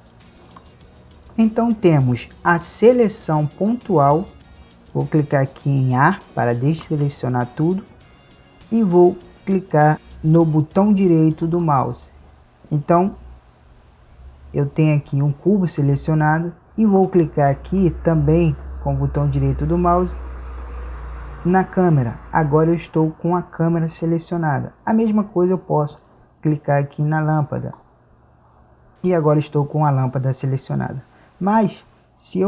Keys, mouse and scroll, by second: 7.0 a, 11.8-14.0 right drag, 14.5-16.7 middle drag.